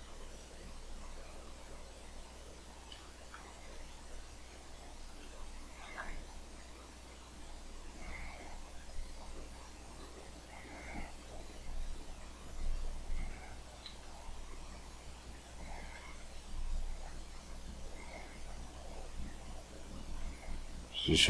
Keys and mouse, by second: 3.7-6.6 drag, 6.6 middle click, 6.9-8.9 drag, 8.9 f, 10.0 f, 11.9-12.9 drag, 17.0-18.9 drag.